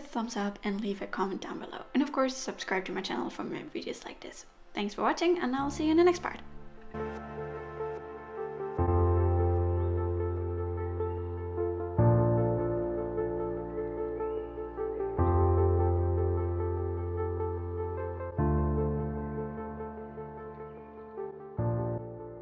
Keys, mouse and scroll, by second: 2.6 middle click, 4.7 shift+middle click, 5.7 shift+middle click.